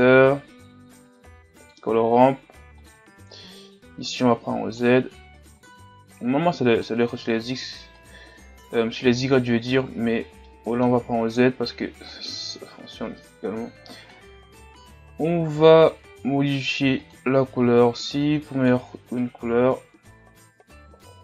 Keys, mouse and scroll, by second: 5.6-9.3 drag, 10.4-12.2 middle drag, 12.2-18.2 drag.